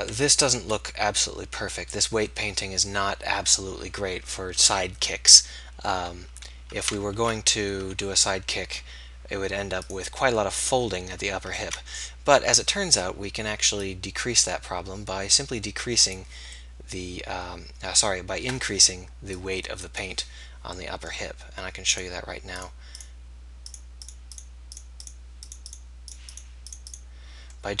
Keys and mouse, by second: 0.4 KP_3, 0.8 KP_1, 7.1 alt+r, 8.0 r, 11.6 ctrl+z, 13.8-27.8 drag.